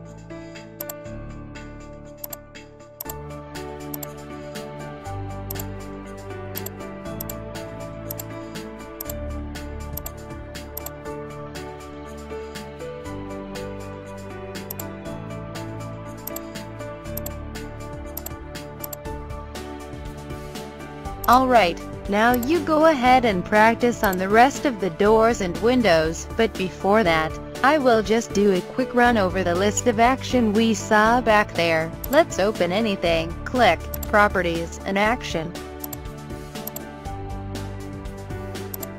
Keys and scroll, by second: 12.2 o, 13.9 n.